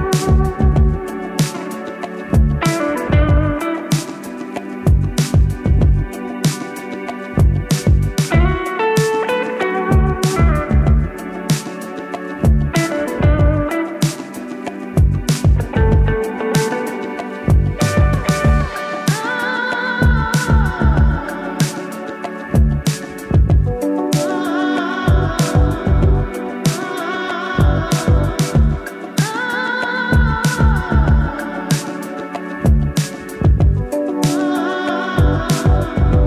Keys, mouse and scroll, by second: 0.0-1.0 ctrl+drag, 2.8-5.3 typing, 5.4 click, 7.6 alt+click, 8.6 middle click, 10.2-10.8 scroll down 1, 12.6 middle click, 13.3 scroll down 1, 14.3 middle click, 14.9-16.1 scroll up 1, 16.2-16.8 drag, 17.9-18.8 scroll up 1, 19.2-19.8 click, 21.2 alt+click, 22.5 click, 27.2 shift+click, 30.2 right click, 32.3 click.